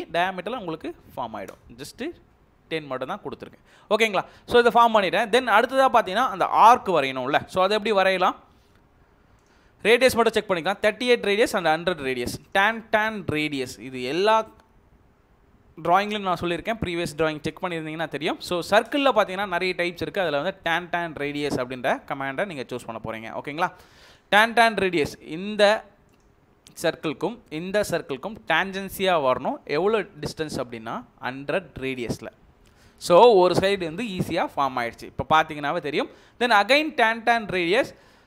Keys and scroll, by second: 1.4 Return, 29.4-30.7 typing, 31.8 Return.